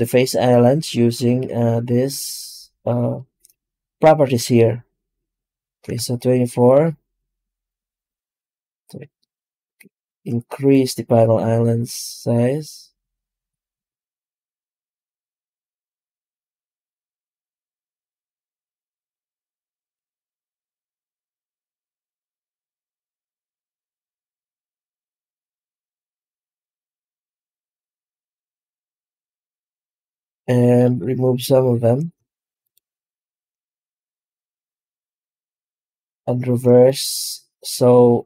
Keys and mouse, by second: 30.8 F9.